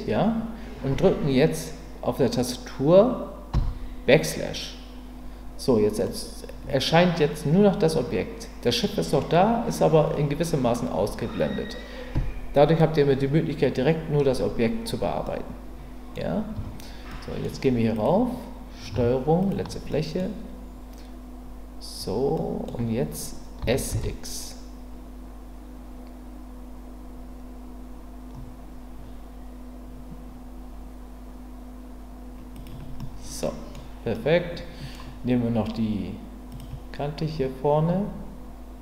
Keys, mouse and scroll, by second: 3.5 KP_Divide, 6.0-8.8 middle drag, 15.2-16.1 middle drag, 16.5 Tab, 17.1 middle click, 19.4 ctrl+click, 19.9 middle click, 22.3 middle click, 23.6 s, 23.9 x, 32.5 click, 33.0 middle click, 34.2 middle click.